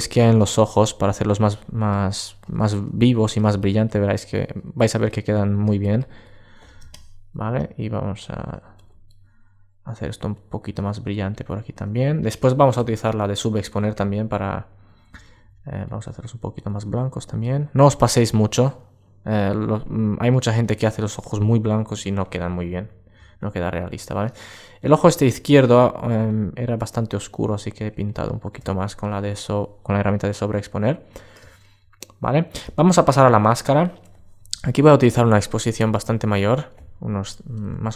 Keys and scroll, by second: 25.1 super+space, 32.9 super+space.